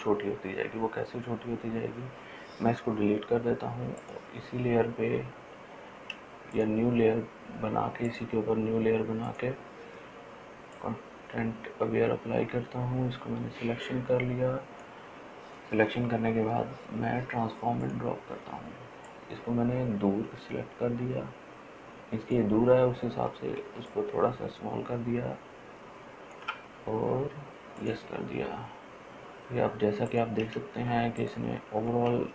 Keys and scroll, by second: 3.5 Delete, 31.3 ctrl+space, 31.7 ctrl+space, 31.9 ctrl+space, 32.0 ctrl+space.